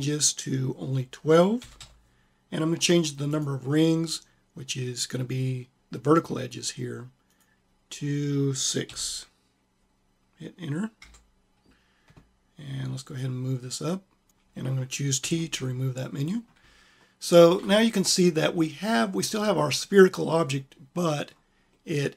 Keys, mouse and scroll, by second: 7.2-8.8 drag, 13.2 click.